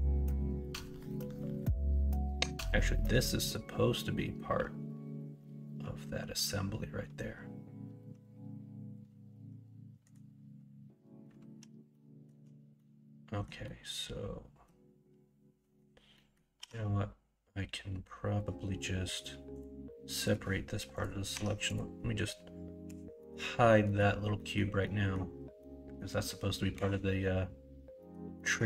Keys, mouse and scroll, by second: 11.9 middle click, 12.7 middle click, 13.6-14.6 middle drag, 16.2 middle click, 16.5 p, 21.3 Tab, 22.8 h, 23.1 middle click, 23.8 middle drag, 24.3 middle click, 24.8 middle click, 25.6 middle click, 28.0 middle click, 28.3 middle click.